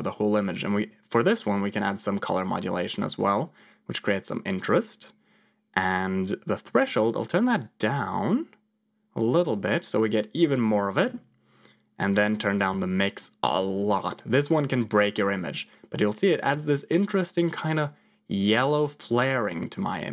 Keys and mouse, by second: 1.3-4.5 drag, 6.7-10.8 shift+drag, 12.3 click, 13.4-20.1 shift+drag.